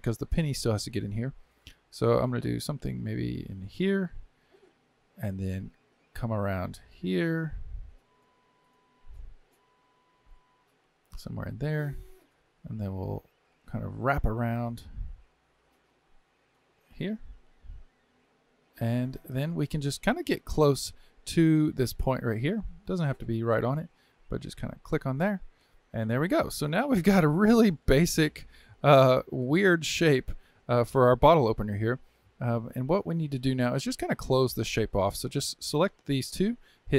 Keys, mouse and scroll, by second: 3.7 ctrl+right click, 10.9-17.2 ctrl+right drag, 24.8 ctrl+click, 25.8 ctrl+right click, 25.9-27.4 scroll up 4, 27.4-27.9 scroll down 2, 27.9-30.9 shift+middle drag, 33.0-33.5 scroll up 2, 33.5-35.1 shift+middle drag, 35.1 click.